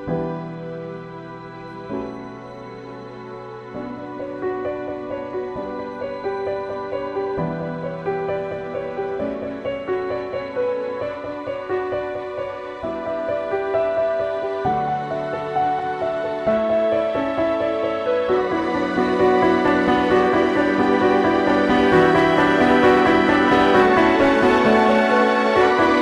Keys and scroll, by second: 2.2 x, 2.8 x, 11.0 ctrl+i, 15.8 ctrl+i, 16.3 space, 16.4 [, 18.0 space, 18.5 space, 23.2 ctrl+i, 25.1 ctrl+z.